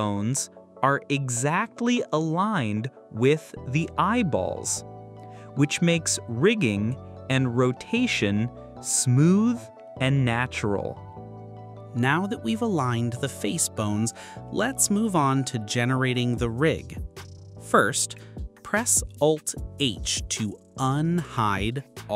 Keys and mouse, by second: 0.2 shift+s, 4.8 click, 9.3 click, 14.9 click, 16.4 click.